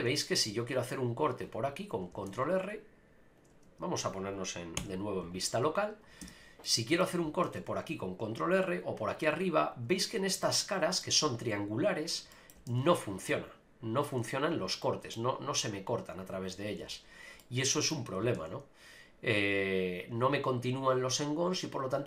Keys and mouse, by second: 0.3 ctrl+r, 2.3 ctrl+r, 3.7 Tab, 6.2 Tab, 6.6 click, 7.4 ctrl+r, 10.4 middle click, 12.3 middle click, 12.7 ctrl+r, 14.5 right click, 14.8 middle click, 16.8 ctrl+z, 17.4 middle click, 18.3 ctrl+r.